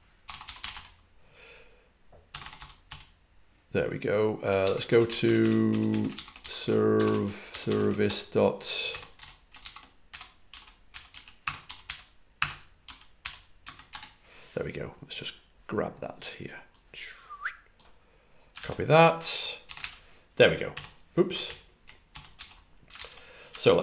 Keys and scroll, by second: 0.1-3.2 typing, 4.7-9.0 typing, 10.5-14.3 typing, 19.7 super+v, 21.1-22.7 typing.